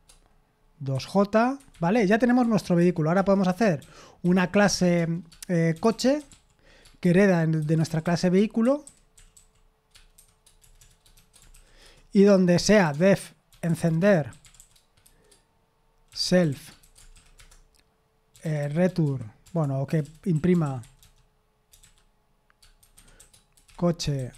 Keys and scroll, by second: 8.2-11.8 typing.